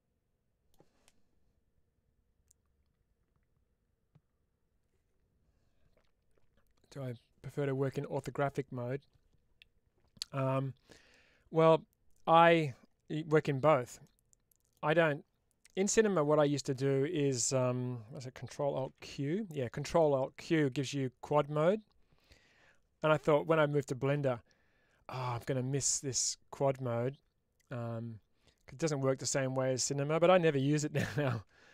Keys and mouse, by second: 13.9 middle click, 18.9 ctrl+alt+q, 30.9 ctrl+alt+q.